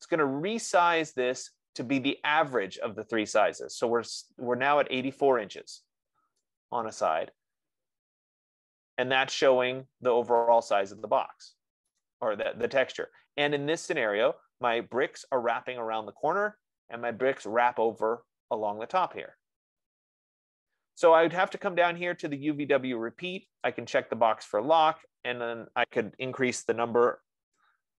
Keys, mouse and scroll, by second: 12.6 right click, 14.1-15.5 scroll, 20.7-21.5 scroll, 24.1 click, 25.5 click, 27.0 typing, 27.8 Tab.